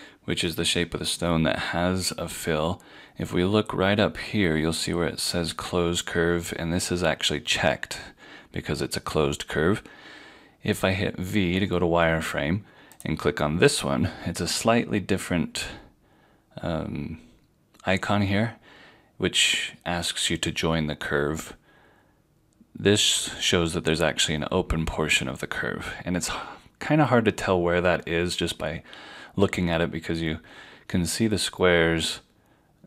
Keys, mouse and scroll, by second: 11.4 v, 13.0 click.